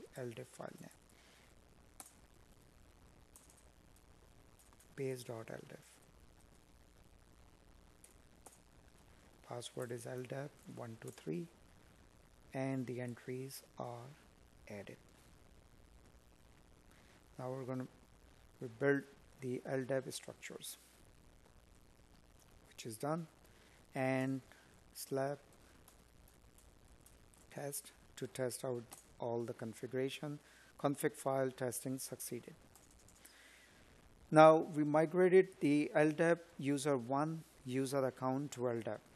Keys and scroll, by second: 32.2 space, 33.3 space, 34.1 space.